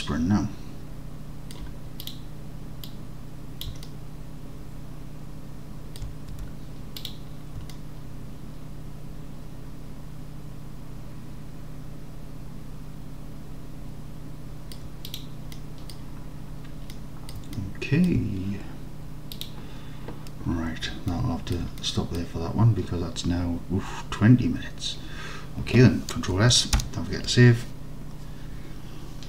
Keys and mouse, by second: 1.0 alt+click, 3.0 click, 3.9-6.0 alt+drag, 6.4 Tab, 7.8-14.8 alt+drag, 15.1 middle click, 15.6-16.0 middle drag, 17.0-17.4 middle drag, 17.6 alt+click, 21.2 click, 21.8-22.2 drag, 26.9 ctrl+s.